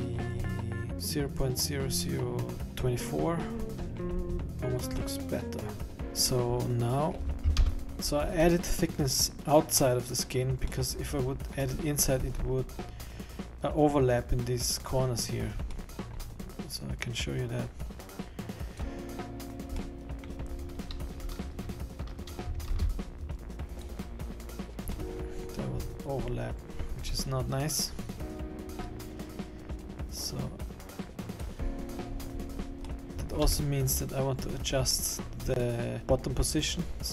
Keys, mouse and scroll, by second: 0.2-0.9 scroll up 6, 0.9-1.2 scroll down 3, 3.5 scroll up 4, 3.7 middle click, 3.7 scroll down 4, 4.3-4.7 scroll up 2, 4.7-5.4 scroll down 2, 5.4 middle click, 6.1-7.0 scroll down 1, 7.0 middle click, 7.8 KP_1, 7.9 middle click, 7.9 scroll down 10, 8.3-9.0 scroll up 8, 10.9 middle click, 12.3-13.7 scroll up 4, 15.8 middle click, 17.4 click, 19.8 middle click, 22.7 shift+b, 25.3 middle click, 25.9-26.8 scroll down 8, 26.8-28.1 scroll up 6, 29.8 click, 32.1-32.8 scroll down 15, 33.1 middle click, 33.1 scroll up 4, 33.7 KP_1, 34.5-34.9 scroll down 4, 34.9-35.9 scroll up 7.